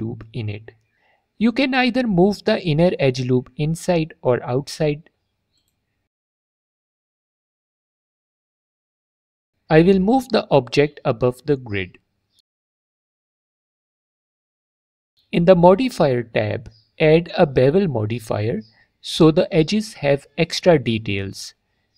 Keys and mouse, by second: 1.7-2.9 drag, 2.9 s, 6.4 click, 6.9 middle click, 8.2 Tab, 9.2 middle click, 10.2 middle click, 11.1-11.4 middle drag, 12.5 middle drag, 13.1 middle click, 13.7 alt+click, 16.1 click, 17.1-19.1 drag, 21.3 F4.